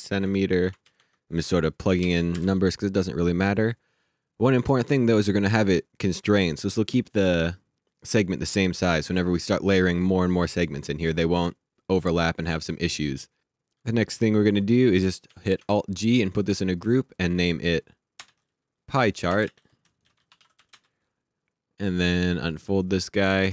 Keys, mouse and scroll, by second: 0.5 shift+Tab, 0.8 KP_2, 2.0 KP_1, 2.3 KP_Enter, 6.0 click, 14.7 alt+Num_Lock, 15.3 alt+g, 17.2 click, 18.1 Return, 19.0-21.0 typing, 23.2 click.